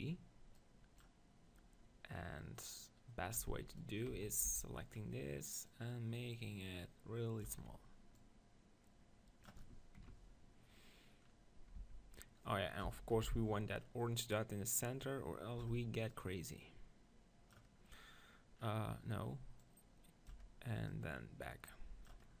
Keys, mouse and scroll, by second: 0.6-1.8 right drag, 2.6-3.7 right drag, 3.5 Tab, 3.7 middle click, 4.1 z, 4.5 b, 5.7-7.3 drag, 7.5 Tab, 8.1-9.4 drag, 11.8 Tab, 13.1 ctrl+l, 14.7-17.9 drag, 18.5 click, 18.7 middle click, 19.6-22.4 drag, 20.5 Tab.